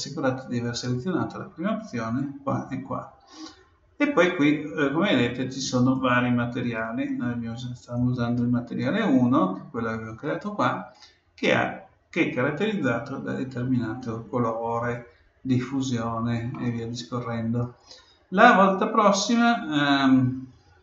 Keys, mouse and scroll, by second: 5.7-7.6 drag, 16.5-18.4 middle drag.